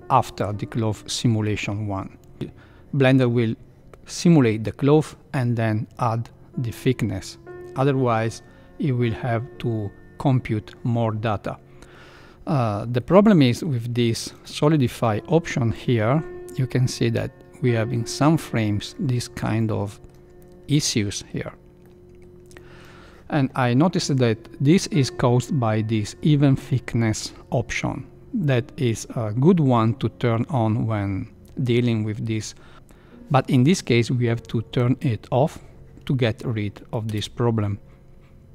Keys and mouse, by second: 12.9-13.3 middle drag, 14.0 shift+middle click, 14.4 middle click, 15.7-18.9 drag, 19.5-20.1 middle drag, 20.8-21.3 middle drag, 21.9-22.3 middle drag, 22.7 middle drag, 34.8 click, 37.1 space.